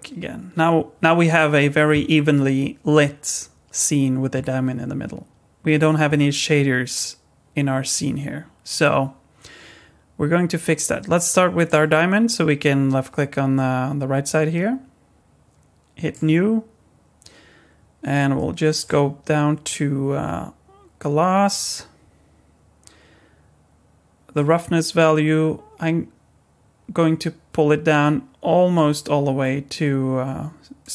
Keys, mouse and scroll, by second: 5.3 scroll up 1, 11.6 click, 16.1 click, 18.8 click, 24.3 click.